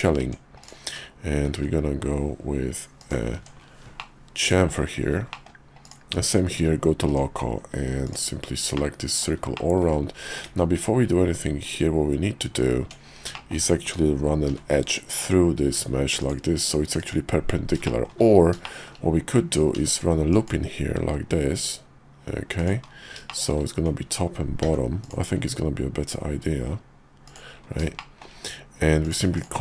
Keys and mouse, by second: 0.2 Tab, 0.6 click, 1.4 ctrl+b, 3.4 Tab, 4.0 middle click, 5.3 middle click, 5.8 click, 6.2 /, 7.1 Tab, 8.0 alt+click, 8.8 middle click, 9.5 shift+middle click, 10.5 `, 11.7 KP_5, 12.8 Tab, 13.3 shift+click, 14.5 k, 17.8 shift+click, 18.6 shift+middle click, 19.7 ctrl+r, 23.3 shift+middle click, 24.6 ctrl+r, 28.0 shift+middle click, 29.0 click, 29.3 shift+click.